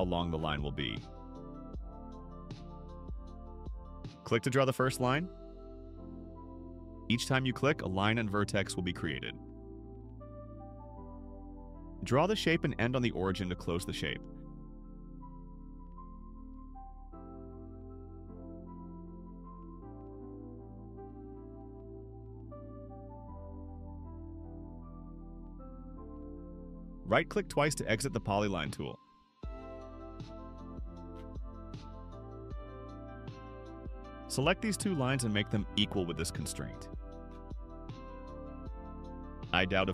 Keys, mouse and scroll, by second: 1.3 middle click, 5.3 click, 5.9 scroll up 1, 9.9 click, 12.6 click, 16.1 click, 17.2 right click, 19.4 click, 21.2 click, 23.9 click, 26.5 click, 28.1 right click, 29.2 right click, 33.0 middle click, 33.0 scroll up 2, 34.6 click, 35.1 middle click, 36.4 click.